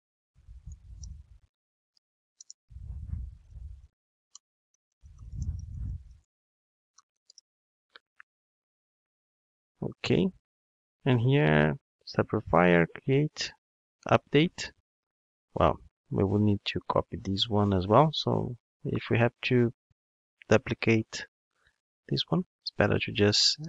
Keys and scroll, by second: 1.9 alt+shift+Right, 21.8 super+x.